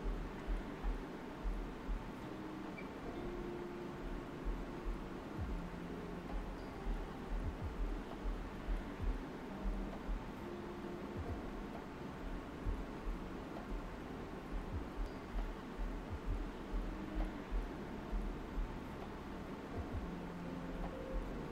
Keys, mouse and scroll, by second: 1.6 alt+right click, 2.6 alt+right click, 3.2 click, 4.8 shift+click, 7.4 shift+click, 8.5 d, 11.4 d, 11.6 shift+click, 12.4 alt+right click, 19.3 alt+right click, 20.9-21.3 typing, 20.9 click.